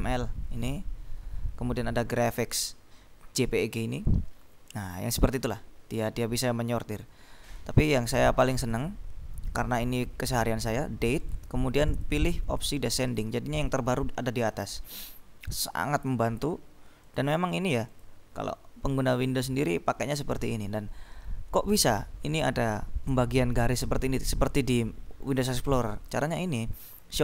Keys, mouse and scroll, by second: 0.6-1.6 scroll down 2, 1.6-2.3 scroll up 2, 4.1-6.2 scroll down 2, 8.9 click, 11.3 click, 12.6 click, 13.6-16.1 scroll up 4, 17.2 click, 18.0 click, 24.2-25.6 scroll down 3, 26.3 right click.